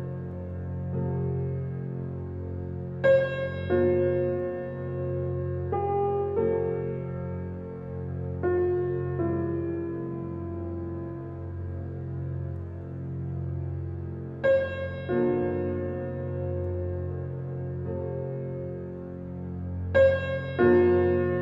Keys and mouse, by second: 0.4 alt+click, 1.3 ctrl+alt+click, 4.2 click, 7.1 click, 8.3-11.6 typing, 12.7-14.7 typing, 15.8-19.3 typing, 20.4-21.4 alt+drag, 20.4 typing.